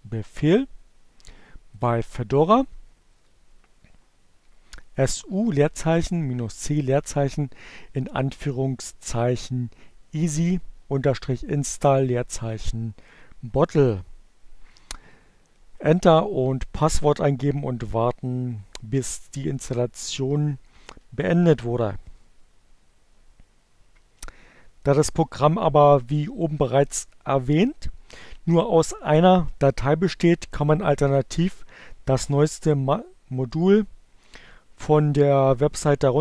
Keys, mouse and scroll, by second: 1.9 Up.